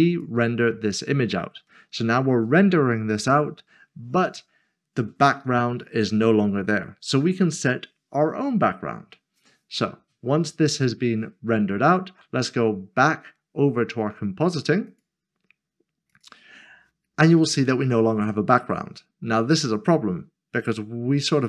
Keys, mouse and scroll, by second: 14.9 click, 21.3 click.